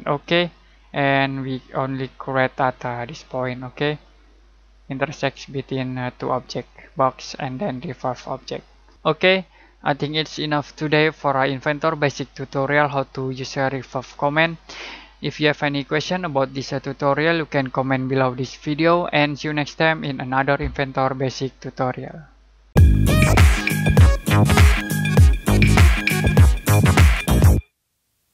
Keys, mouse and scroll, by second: 8.9 y.